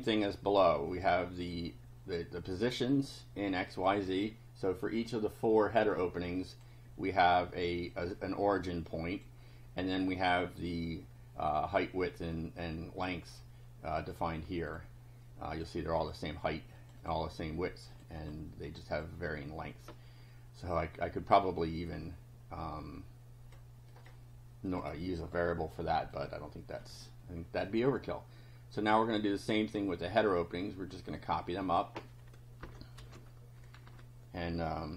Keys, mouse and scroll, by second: 0.9 click, 2.9-4.0 drag, 6.5 click, 7.9-9.4 drag, 10.8-13.2 drag, 14.0 click, 14.7 click, 15.5 click, 16.0 click, 16.8 click, 17.9 click, 18.7 click, 20.7-23.7 drag, 23.9 click, 24.7 click, 26.1 click, 28.8 click, 29.8 right click, 31.0 click, 31.7 click, 32.6 Return, 33.0 ctrl+v, 33.9 Home.